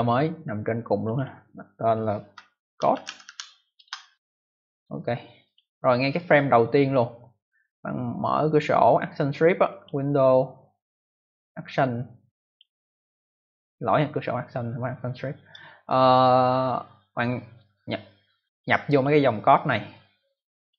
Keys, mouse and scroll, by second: 0.9 click, 1.1 click, 2.4-3.7 typing, 5.4 click, 6.1 click, 9.6 click, 12.4 click, 18.8 click, 20.6 click, 20.7 click.